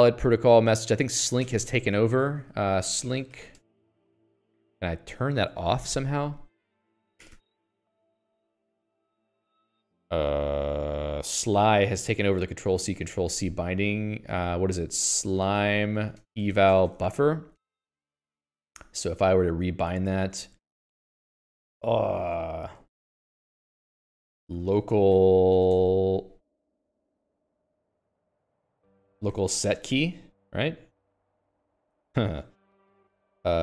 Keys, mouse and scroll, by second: 1.3 click, 1.9 q, 2.5 click, 2.9 alt+x, 3.0-4.3 typing, 4.7 ctrl+g, 5.9 Escape, 8.6 ctrl+g, 9.7 ctrl+c, 13.2 click, 13.4 Escape, 14.8 alt+x, 15.2-18.0 typing, 18.2 ctrl+g, 18.6 Escape, 18.8 Escape, 20.6 alt+:, 21.1 (, 24.7-30.6 typing, 26.1 Tab, 28.3 Escape, 31.8 Tab.